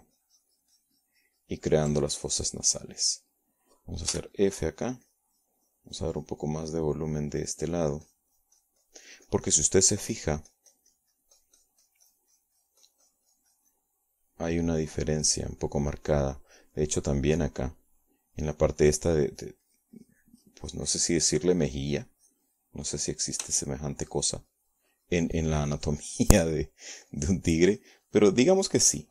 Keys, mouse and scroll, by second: 3.7 ctrl+middle click, 4.7 middle click, 5.9 f, 6.1 click, 6.5-15.7 drag, 15.7-16.9 middle drag, 17.1-18.3 middle drag, 20.5 middle click, 21.1-25.0 drag, 25.3-29.1 shift+drag.